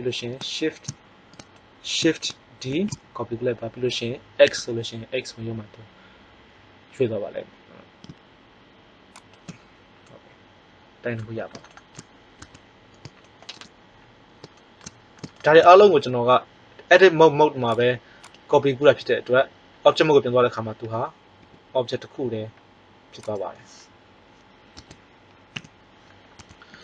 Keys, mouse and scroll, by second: 2.6 shift+d, 12.4 Tab, 21.4 g, 24.7 Tab, 25.6 a, 26.3 Tab.